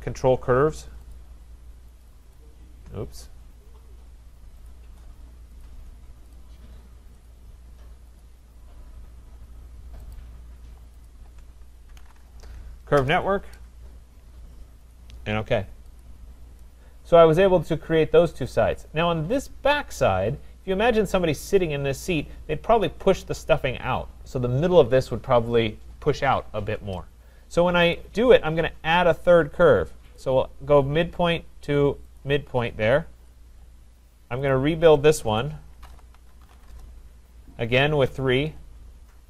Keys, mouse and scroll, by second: 1.1 shift+click, 2.0 click, 2.3 click, 3.2 click, 4.7 click, 5.6 click, 6.4 shift+click, 7.3 shift+click, 8.2 click, 10.2 click, 11.7-13.0 typing, 11.9 shift+click, 15.0 click, 16.0 click, 18.5 right click, 19.1-19.9 scroll, 19.9-21.0 scroll, 28.0 click, 28.5-30.2 scroll, 30.2 click, 32.2 click, 33.1 Return, 34.5 click, 35.4 click, 35.6-37.0 typing, 38.1 typing.